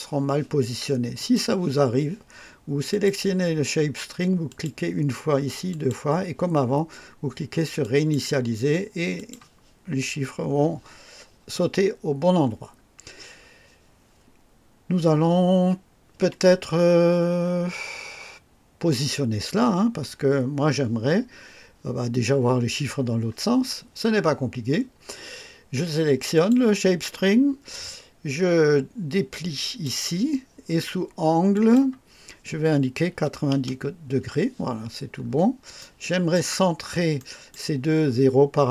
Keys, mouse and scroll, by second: 1.1 click, 2.8 click, 4.4 click, 5.6 click, 7.8 click, 9.1 click, 12.3 scroll up 2, 13.0 scroll down 1, 26.3 click, 29.2 click, 31.5 click, 33.0 KP_9, 33.5 KP_0, 35.0-35.4 scroll up 1, 35.7-36.5 right drag, 36.7 scroll down 1, 37.1 right click.